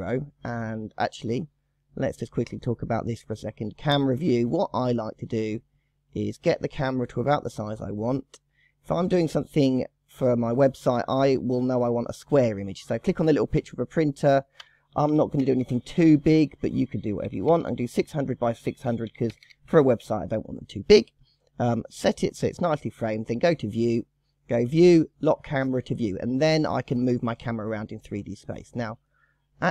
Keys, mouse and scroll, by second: 5.6-8.5 scroll up 1, 8.8 click, 9.8-13.3 scroll up 4, 13.3 click, 14.0-15.5 drag, 15.5 KP_0, 17.3 KP_6, 17.4 KP_0, 17.6 KP_0, 18.2-19.4 drag, 19.4 KP_0, 21.2-23.9 scroll down 2, 24.0 click, 25.6 click, 26.5 click, 27.0 scroll up 2, 27.1-28.5 scroll down 10, 28.8-29.2 shift+middle drag, 29.2-29.7 scroll up 4.